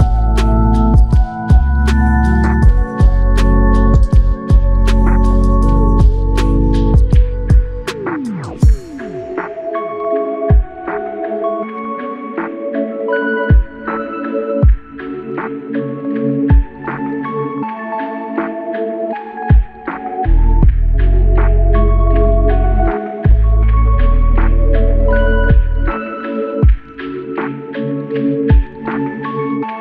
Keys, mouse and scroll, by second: 8.1 ctrl+alt+click, 9.9 ctrl+alt+click, 15.2 ctrl+alt+click, 16.5 alt+click, 17.7 alt+shift+click, 19.3 alt+click, 24.4 alt+click.